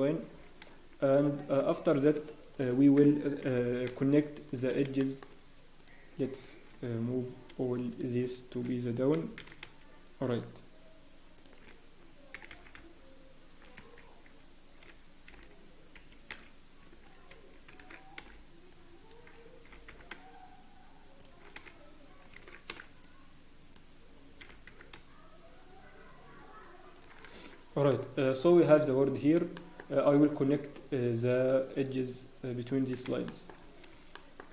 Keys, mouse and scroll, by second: 0.1 g, 2.5 click, 3.5 g, 5.0 shift+middle click, 5.7 click, 8.0 shift+middle click, 8.6 shift+middle click, 9.1 g, 17.9 alt+a, 18.2 b, 19.6 g, 22.4 alt+a, 22.7 b, 24.4 g, 27.3 Tab, 27.3 scroll, 27.7-28.0 scroll down 1, 28.0 Tab, 28.4 scroll down 10, 28.7 Tab, 29.5 shift+middle click, 29.5 scroll up 2, 33.0 shift+Tab, 33.2 shift+middle click, 33.5 scroll up 1, 34.1 shift+middle click.